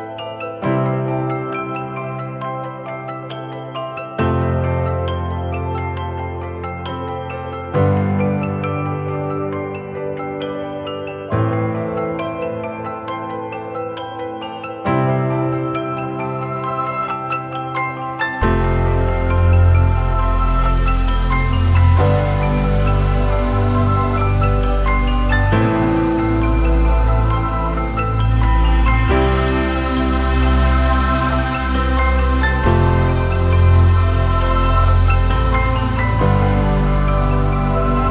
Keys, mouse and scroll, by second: 4.0 ctrl+=, 5.7-6.1 alt+scroll down 1, 19.2 e.